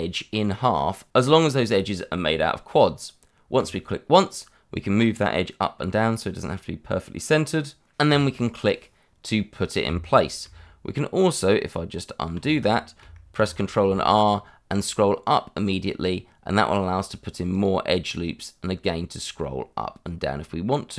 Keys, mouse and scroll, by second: 3.6 click, 8.0 click, 12.3 ctrl+z, 13.4 ctrl+r, 14.8-16.3 scroll up 1, 16.3-17.1 scroll down 1, 17.1-17.5 scroll up 1, 17.5 click.